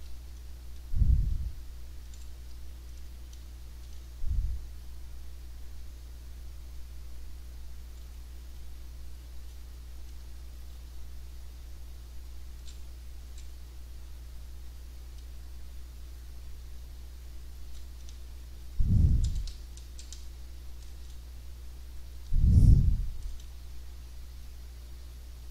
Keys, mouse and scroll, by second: 0.0 a, 0.7 s, 2.5-4.0 typing, 3.4-25.5 drag, 8.6 w, 9.8-10.7 typing, 13.2 d, 15.2 a, 16.6 w, 18.1 s, 19.4 w, 19.8 d, 22.2 w, 23.4 s.